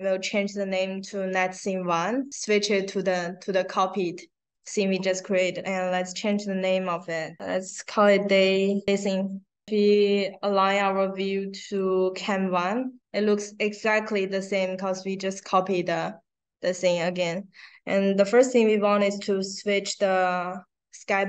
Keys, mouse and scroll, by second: 2.3 click, 2.4 click, 4.5 right click, 6.1 click, 7.8 a, 9.8 right click, 11.5 click.